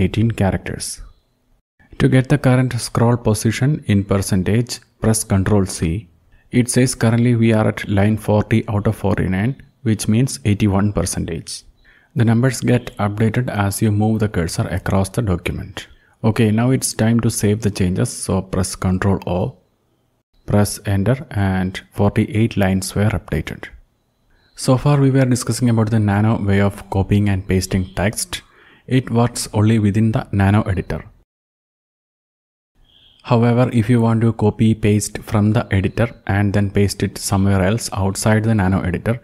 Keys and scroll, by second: 3.9 ctrl+c, 9.7 Up, 10.3 Up, 10.6 Up, 11.2 Up, 11.6 Up, 16.2 ctrl+o, 20.2 Return, 24.3 Up, 26.2 shift+Down, 26.7 shift+Down, 27.4 shift+Down, 32.7 ctrl+u, 36.6 alt+u.